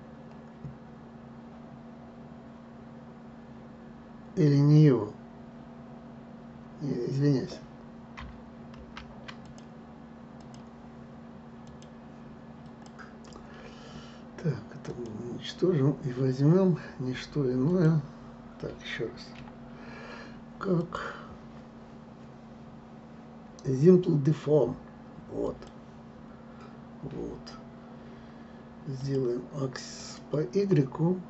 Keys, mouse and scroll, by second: 8.8 ctrl+z, 9.4 click, 10.3 click, 15.0 click, 17.8 click, 19.5 a, 20.9-23.9 drag, 29.1-31.2 drag.